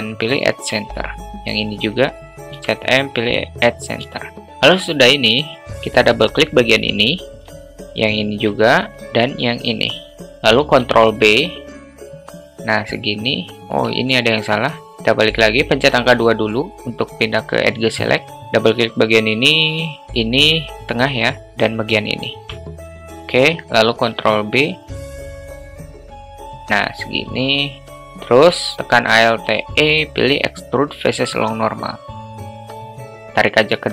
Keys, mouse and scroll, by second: 2.1 click, 3.4 m, 4.7 middle click, 7.2 click, 8.6 shift+click, 9.3 alt+shift+middle click, 11.3 ctrl+b, 16.6 2, 18.4 a, 18.5 drag, 18.7 click, 20.4 shift+click, 22.2 shift+click, 22.4 shift+click, 24.6 ctrl+b, 27.9 alt+middle click, 28.3 alt+shift+middle click, 29.8 alt+e, 30.1 alt+e.